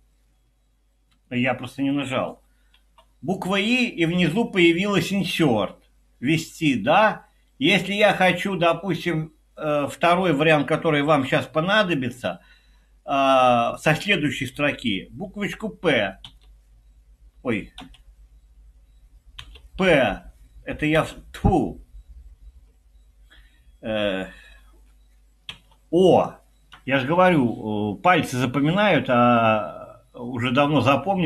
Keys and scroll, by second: 2.8 i, 11.1 Escape, 16.3 p, 17.8 Escape, 19.4 p, 21.0 Escape, 25.6 o.